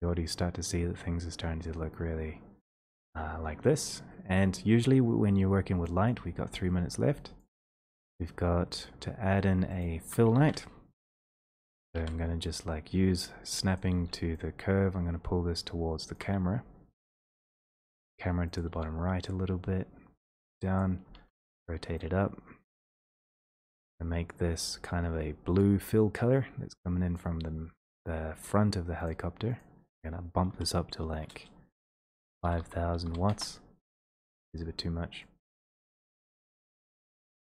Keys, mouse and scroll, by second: 1.0 click, 3.0 click, 10.0 alt+middle click, 11.0 e, 11.6 click, 12.1 e, 13.9 click, 14.1 w, 29.6 click, 30.5-33.0 typing, 33.3 Return.